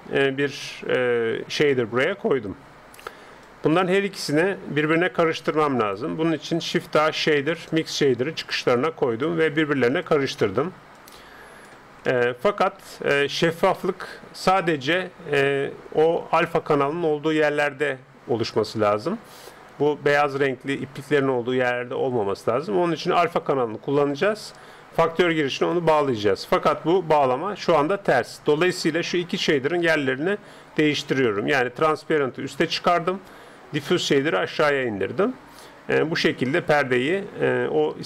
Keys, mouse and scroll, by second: 1.4-3.4 middle drag, 3.4-5.2 drag, 4.2-6.6 middle drag, 5.5-7.2 drag, 6.7 shift+a, 9.4-12.8 drag, 12.1 right click, 12.8-16.6 middle drag, 18.4-18.8 scroll up 1, 18.8-21.3 middle drag, 24.0-25.8 drag, 27.4 middle click, 28.2-28.6 scroll down 1, 28.6-29.8 middle drag, 29.8-31.6 drag, 35.6 middle click, 36.8-38.0 middle drag.